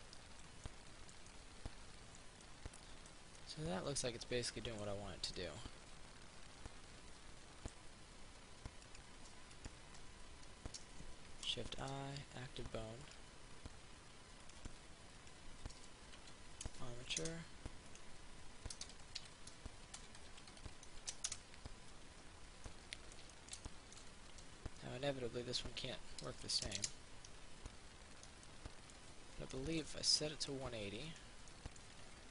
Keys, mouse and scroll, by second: 6.9-8.7 middle drag, 9.1 right click, 9.7 shift+right click, 11.9 click, 13.3 right click, 14.7 click, 16.4 ctrl+v, 17.5 Return, 18.1 click, 19.0-20.5 typing, 21.5 shift+Return, 22.9 middle click, 25.9 click, 26.7 click, 27.9-29.7 middle drag, 31.1 right click, 31.6-32.3 middle drag.